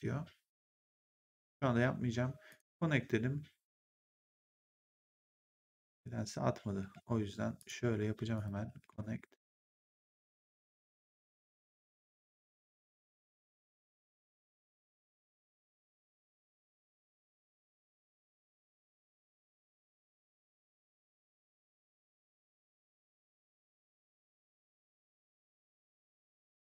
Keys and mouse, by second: 2.4 click, 5.8 click, 6.7 w, 7.5 click, 8.7 w, 9.7 click, 11.3 w, 11.7 click, 13.0 w, 13.6 click, 14.7 w, 15.6 click, 16.5 w, 17.4 click, 18.4 w, 19.2 click, 20.5 w, 21.3 click, 22.6 w, 23.5 click, 23.8 w, 24.8 click, 25.1 w, 25.9 click.